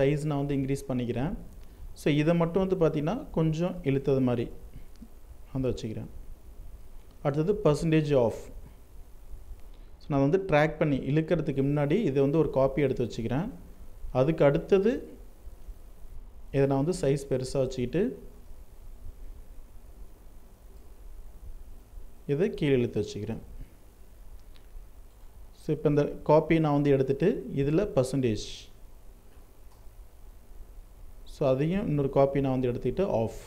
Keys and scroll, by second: 9.3 ctrl+alt+z, 14.7 ctrl+t, 20.9 ctrl+t, 29.0 ctrl+Return.